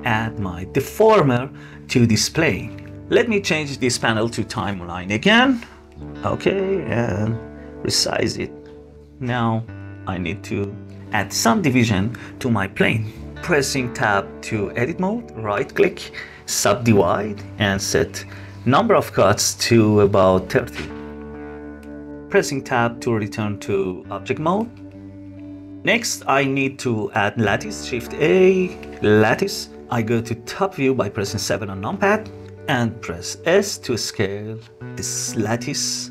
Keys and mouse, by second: 3.5-5.2 drag, 5.8-8.2 drag, 9.8-10.3 shift+middle drag, 13.9 Tab, 15.8 click, 19.1-20.7 drag, 21.6 click, 23.3 Tab, 23.9 middle click, 24.8-25.8 middle drag, 27.3 shift+a, 29.9 KP_7, 32.5 s.